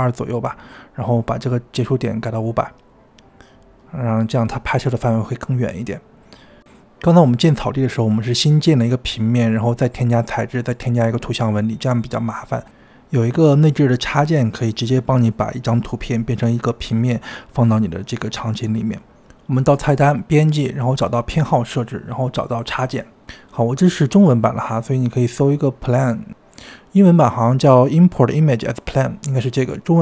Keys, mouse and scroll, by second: 1.9 KP_0, 3.3 KP_0, 4.0 KP_0, 5.3 click, 6.2-8.4 middle drag, 8.4-10.0 scroll up 2, 10.0-16.7 middle drag, 16.7-30.0 drag.